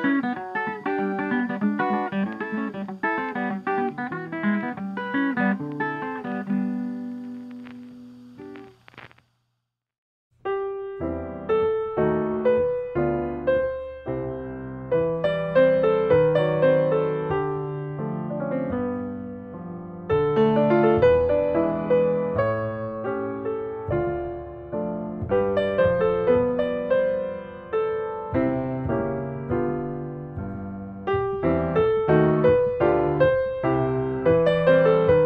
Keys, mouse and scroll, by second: 2.6 click, 4.2 click, 4.7 Escape, 4.9 scroll up 5, 5.1 middle click, 5.9 scroll, 6.4 click, 7.0 click, 8.6 click, 10.4 click, 11.5-12.6 drag, 12.8 click, 15.6 scroll, 16.3 s, 17.4 click, 18.7 click, 21.9-22.4 scroll, 22.6 scroll, 23.6 click, 26.0 click, 27.3 5, 27.5 Return, 29.2 Escape, 32.0-33.1 drag, 33.9-35.0 drag.